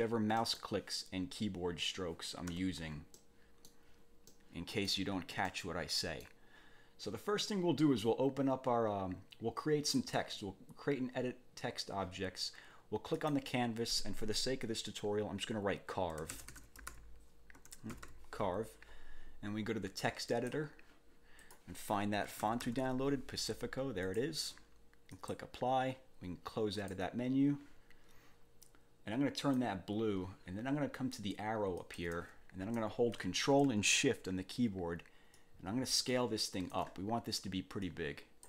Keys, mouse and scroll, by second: 0.4 click, 2.5 1, 3.1 click, 4.3 click, 5.5 click, 10.0 click, 13.1 click, 16.1-18.6 typing, 20.3 click, 21.4 click, 22.0-23.4 typing, 24.1 click, 25.1 click, 26.7 click, 29.4 click, 31.8 click, 35.3-36.9 ctrl+shift+drag, 37.8 click.